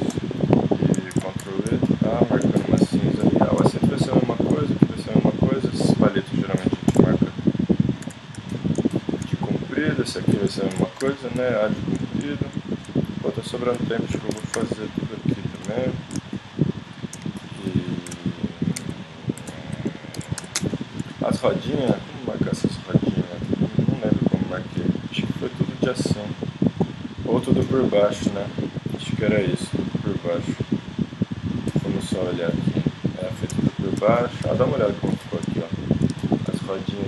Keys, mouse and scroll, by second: 1.1 ctrl+e, 4.8 middle click, 6.9 ctrl+e, 9.5 middle click, 10.0-11.7 right drag, 10.8 ctrl+e, 11.7-12.8 middle drag, 14.2 right click, 14.3 ctrl+e, 15.2-16.3 right drag, 16.5 middle click, 18.4-19.7 middle drag, 19.7 middle click, 20.2 ctrl+e, 20.8 middle click, 27.0 click, 27.6-37.0 middle drag.